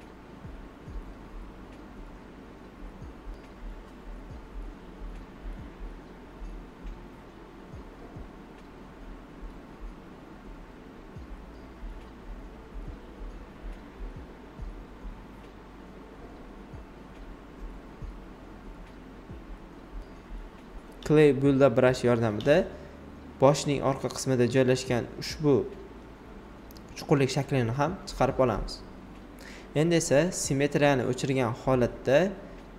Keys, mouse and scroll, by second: 12.5 right click, 14.5 alt+right click, 15.0 space, 15.4 click, 15.5 space, 16.0 right click, 17.9 alt+right click, 18.2-20.5 typing, 19.3 alt+right click, 20.1 click, 21.0 alt+click, 22.5-23.9 shift+drag, 23.9 alt+right click, 24.2 ctrl+z, 28.3 click, 29.7 alt+right click, 30.5-32.7 drag.